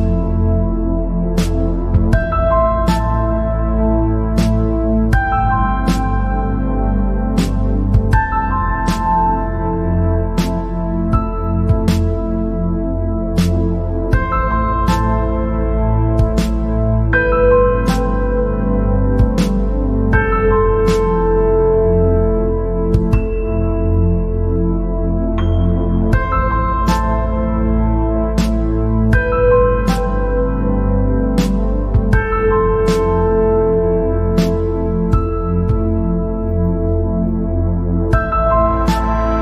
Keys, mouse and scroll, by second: 0.1-0.7 scroll up 4, 0.8 scroll down 1, 0.9 middle click, 1.7 click, 3.0 click, 3.6 scroll down 2, 4.4 scroll up 2, 5.0-6.0 middle drag, 6.0-6.6 scroll down 4, 7.6-8.6 drag, 8.6-8.9 scroll up 2, 8.9 scroll down 2, 9.1 middle click, 9.7 scroll up 2, 10.2 scroll down 1, 10.4 middle click, 11.1 scroll up 2, 11.6-12.0 scroll down 2, 12.0-13.4 middle drag, 13.4-13.8 scroll up 1, 13.8-14.2 scroll down 1, 14.2-16.5 middle drag, 16.5 click, 17.3-18.4 right drag, 18.4 click, 18.9 click, 19.5 right click, 20.3 click, 21.0 scroll up 2, 21.3 scroll down 1, 21.4-24.5 middle drag, 25.1-25.4 scroll down 5, 25.4 middle click, 26.1-26.7 scroll up 5, 26.7 scroll down 1, 26.8 middle click, 27.4 scroll up 2, 29.1 scroll up 1, 32.3 scroll down 2, 32.8 scroll up 3, 33.9 scroll up 2, 34.3 scroll down 3, 34.4 middle click, 35.2 scroll up 3, 35.8 scroll down 3, 36.3 click, 37.3-38.4 drag, 38.4 scroll up 2.